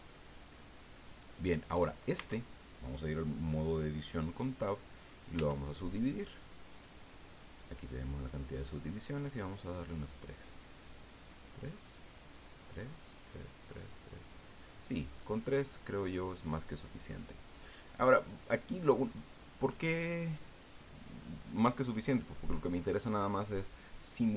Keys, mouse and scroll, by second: 1.0 right click, 2.1 Tab, 5.3 w, 6.7 click, 9.1 click, 11.0-17.3 middle drag.